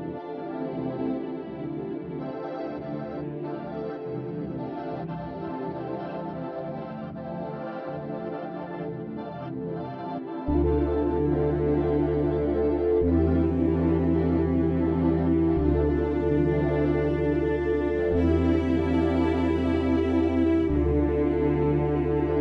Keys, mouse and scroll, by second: 3.3-4.9 middle drag, 4.9 ctrl+r, 7.7-8.6 scroll down 4, 8.6 middle click, 9.2 Tab, 9.4 click, 9.8-12.2 middle drag, 12.2-12.6 scroll up 3, 12.6-13.4 middle drag, 13.4 scroll up 1, 13.6-15.3 middle drag, 15.3-16.2 scroll down 2, 16.2 alt+middle click, 17.0-17.4 scroll up 1, 17.4 click, 18.1 Tab, 18.6-21.2 scroll up 1, 21.2 shift+middle click, 21.6-22.3 scroll down 2, 22.3-22.4 shift+middle drag.